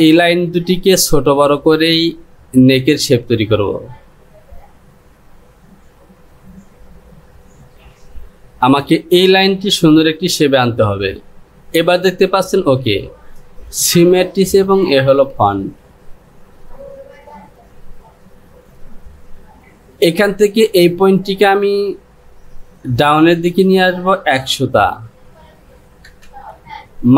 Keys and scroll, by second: 24.9 Down.